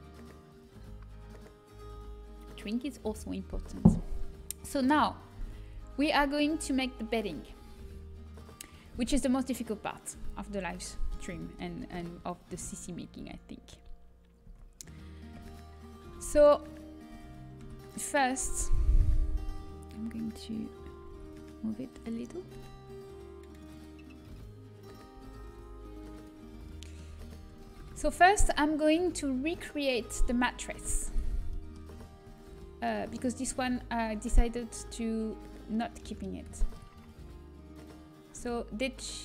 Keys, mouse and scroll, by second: 5.3 Tab, 10.9-12.8 middle drag, 13.1 Tab, 14.4 Tab, 15.3 KP_3, 16.0 Tab, 17.1 z, 18.0 b, 21.3 g, 24.3 g, 26.8-29.9 drag, 27.2 a, 27.4 Tab, 27.5 z, 32.2 middle click, 35.8-38.6 middle drag.